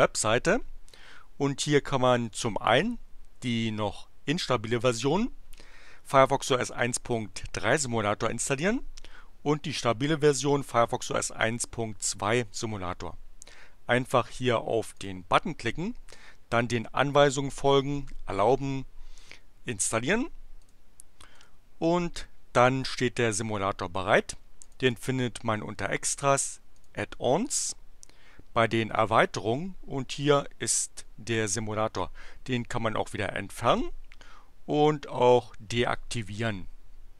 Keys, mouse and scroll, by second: 14.9 click, 20.6 click, 21.2 click, 24.6 click, 26.7 click.